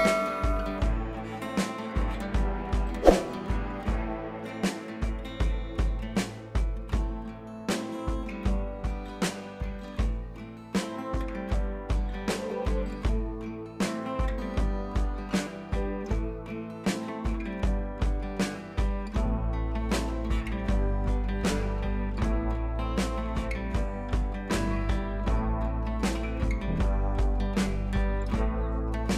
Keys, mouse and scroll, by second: 0.7-2.9 drag, 5.2-7.7 drag, 13.4 ctrl+t, 14.1-16.2 drag, 17.7 g, 18.6 click, 20.5 ctrl+z, 20.8 click, 23.4 click, 24.4 b, 25.1-27.3 drag.